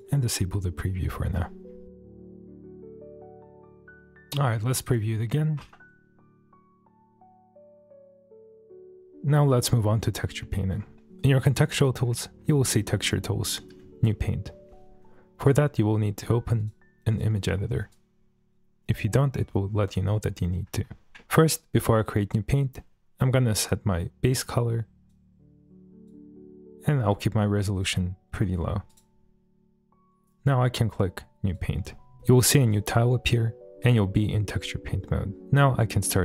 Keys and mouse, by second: 0.5-0.9 middle drag, 1.0 shift+middle drag, 1.8-2.3 typing, 1.9 click, 2.3 middle click, 3.1 click, 3.5 middle click, 3.5 g, 3.5 z, 4.0 middle drag, 4.8 click, 5.4 shift+middle drag, 6.6 space, 7.5 space, 7.5 click, 7.8 click, 8.0 click, 8.2 click, 8.9 space, 11.6 click, 16.6-17.2 drag, 17.9 click, 21.2 middle click, 23.5 click, 27.7 click, 31.5-32.2 drag, 32.2 middle click, 32.6 shift+middle click, 33.0 middle click, 33.8 click, 33.8 f.